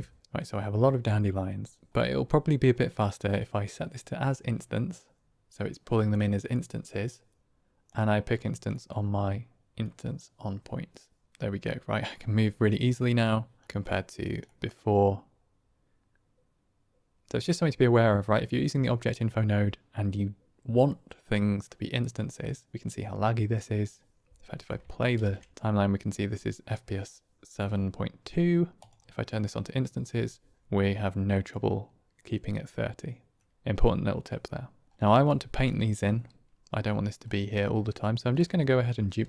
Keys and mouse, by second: 1.8 click, 7.8 click, 9.9 click, 11.3-12.1 middle drag, 13.1 click, 13.5 middle click, 13.9 click, 14.6-24.1 middle drag, 25.3 shift+space, 28.8 click, 31.4-31.8 middle drag, 31.8 click, 32.0-33.3 middle drag, 33.5 shift+space, 35.6 click, 37.5 click, 39.1 shift+d.